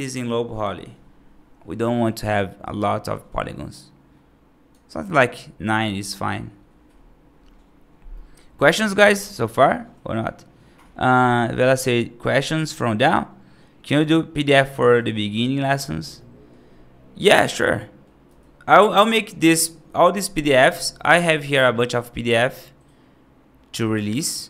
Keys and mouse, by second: 8.0-8.5 middle drag, 12.8-13.8 middle drag, 16.0-16.3 middle drag, 17.6 middle click, 18.1 F2.